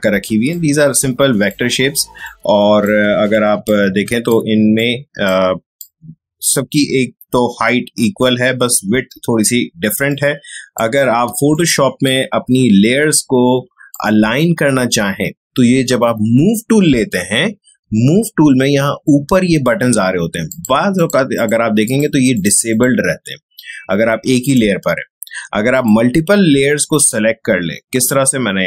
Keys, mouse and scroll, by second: 10.0-16.8 drag, 20.4 click.